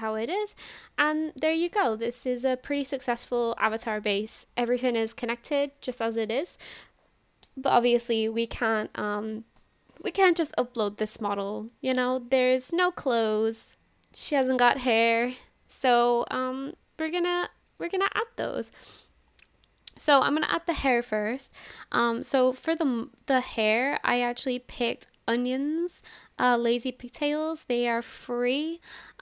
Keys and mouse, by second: 0.3 shift+click, 0.8 click, 17.7 click.